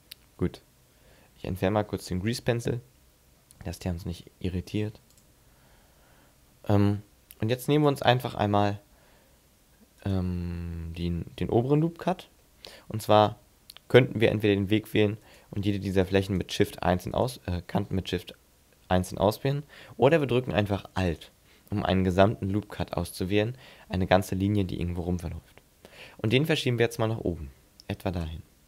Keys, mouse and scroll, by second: 2.4 n, 3.6 scroll up 3, 3.8 scroll down 1, 4.1-5.2 scroll up 2, 5.2 click, 5.9 n, 7.8 right click, 8.9 b, 10.1 right click, 12.4 middle click, 15.2 shift+right click, 16.3 shift+right click, 17.1 shift+right click, 20.1 right click, 21.1 alt+right click, 26.3 click.